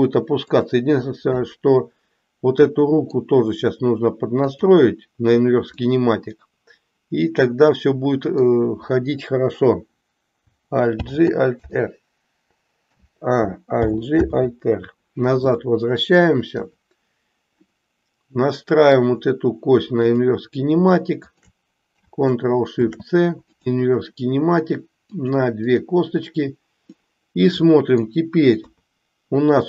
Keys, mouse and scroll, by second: 1.4-3.2 middle drag, 4.4 click, 5.8-8.4 middle drag, 10.9 alt+g, 11.7 alt+r, 12.8 a, 13.8 alt+g, 14.3 alt+r, 17.8-19.1 middle drag, 21.3 shift+click, 25.3 ctrl+shift+click, 27.1-28.1 middle drag.